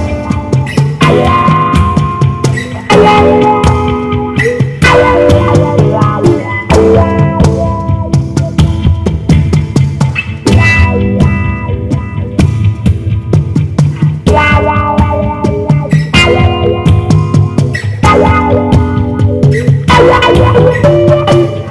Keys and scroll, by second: 18.0 super+d.